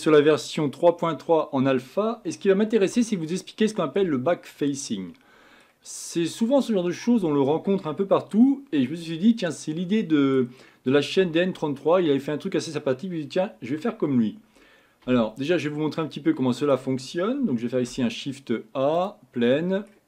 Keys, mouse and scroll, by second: 1.0-1.8 scroll up 3, 1.8-2.6 scroll down 2, 3.0 shift+scroll up 1, 3.0-7.7 shift+middle drag, 9.4-12.7 middle drag, 16.0 x, 16.1-17.7 middle drag, 17.7 shift+a, 19.5-20.0 middle drag.